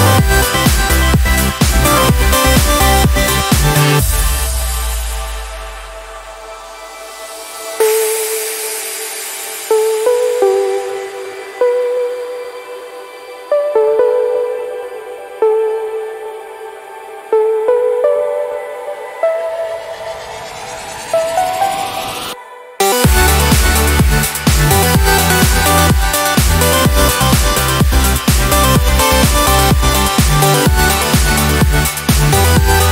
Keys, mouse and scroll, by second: 1.2 ctrl+KP_5, 2.3-2.9 ctrl+scroll up 2, 7.1-7.5 scroll down 2, 8.8 click, 9.7 click, 11.8 ctrl+s, 13.1 ctrl+click, 16.1 ctrl+shift+8, 19.8 ctrl+shift+z, 23.8 click, 26.0 ctrl+d, 29.6 ctrl+shift+8, 32.1 click, 32.1 typing.